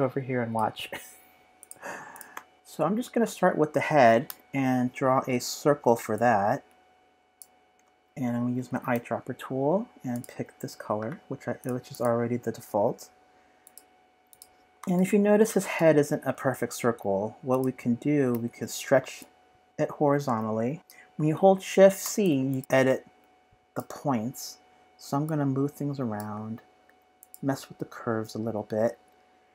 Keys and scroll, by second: 2.5 typing, 4.3 typing, 8.6 typing, 14.8-15.9 typing.